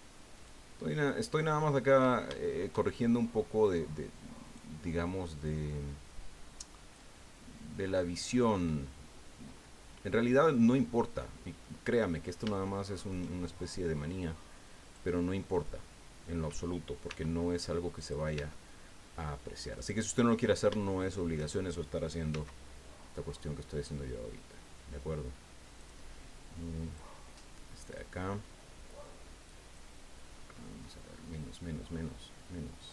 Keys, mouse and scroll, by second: 0.3 right click, 1.0 click, 1.8-2.1 scroll up 2, 2.3 shift+click, 2.9-3.2 shift+scroll up 2, 4.4 right click, 5.7-7.1 drag, 7.3 scroll down 2, 8.2 scroll down 2, 8.3 click, 9.1 scroll down 2, 10.2 scroll down 2, 10.5-11.8 drag, 12.5 shift+click, 14.8 click, 15.5 right click, 17.1 e, 18.0 click, 18.3 e, 19.7 click, 20.4-20.7 scroll up 2, 20.8 shift+click, 22.3 s, 23.3-24.6 scroll down 7, 25.8 click, 26.9 click, 27.8 right click, 29.0 click, 29.7 click, 30.2 scroll down 1, 30.8-31.4 scroll up 4, 32.6 scroll down 2, 32.8-32.9 scroll up 4.